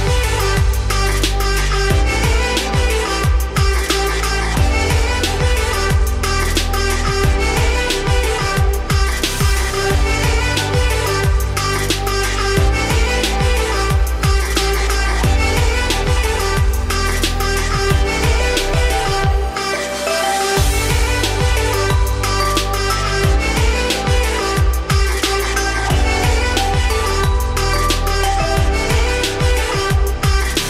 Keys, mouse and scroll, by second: 1.5-3.8 drag, 4.4 click, 5.9 F3, 7.5 middle click, 7.9 z, 10.0 ctrl+click, 10.5 ctrl+click, 11.0 scroll down 2, 11.1-11.5 middle drag, 11.5 z, 11.8-12.1 scroll up 2, 12.1-13.3 middle drag, 13.3 s, 17.5 ., 18.9 s, 21.5-22.0 middle drag, 22.0 scroll up 3, 22.8-23.6 scroll down 1, 23.6 scroll down 2, 23.7-24.4 middle drag, 24.4 scroll down 2, 24.5-25.8 middle drag, 25.8 click, 27.3 z, 29.5 F3.